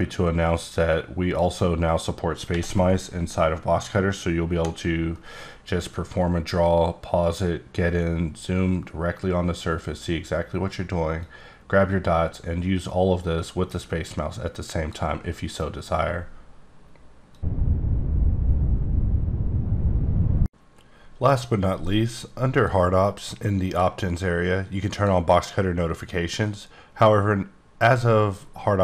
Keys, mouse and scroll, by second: 2.5 b, 11.4 click, 23.6 click, 23.7 click, 24.9 click, 26.4 click.